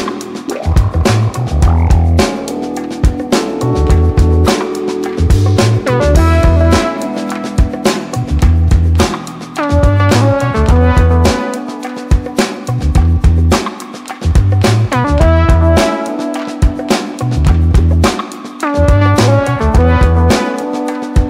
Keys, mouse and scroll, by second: 1.1 scroll up 1, 2.9 click, 4.1 scroll down 1, 5.1 shift+click, 6.8-10.2 typing, 11.7 l, 12.7 scroll down 1, 13.4 scroll up 1, 14.8-18.8 drag, 20.0-21.2 typing.